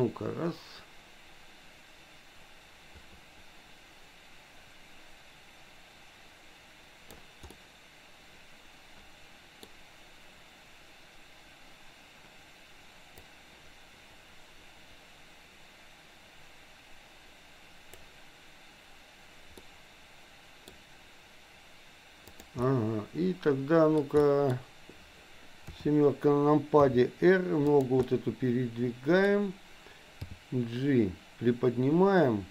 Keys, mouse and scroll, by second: 7.5-9.6 middle drag, 13.4-18.1 drag, 19.6-20.6 middle drag, 22.6-24.0 middle drag, 24.2 middle click, 25.6 KP_7, 26.7 r, 28.1-29.2 middle drag, 30.4 g.